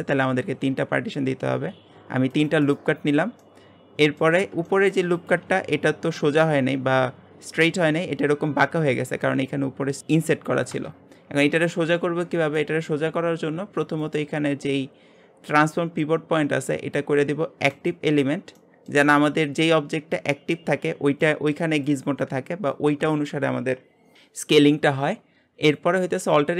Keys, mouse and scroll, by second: 0.7 ctrl+r, 3.4-4.4 shift+middle drag, 4.4 scroll up 1, 4.6 shift+middle click, 5.2 click, 11.6 shift+middle click, 12.2-12.6 scroll up 1, 12.6-14.0 shift+middle drag, 14.0-17.2 drag, 18.6 middle click, 19.1-22.9 scroll up 1, 25.6 click, 26.1 alt+click.